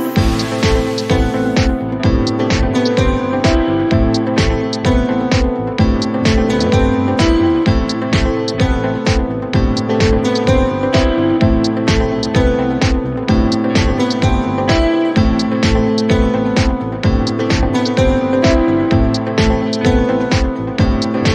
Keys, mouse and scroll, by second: 0.2 click, 2.5 click, 12.6 click, 15.4 click, 17.5 click.